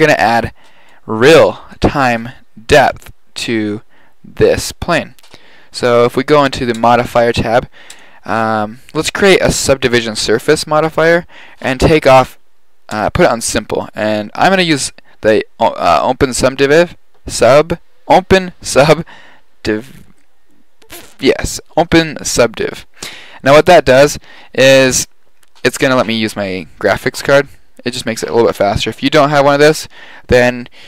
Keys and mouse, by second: 0.7 click, 13.2-13.9 drag.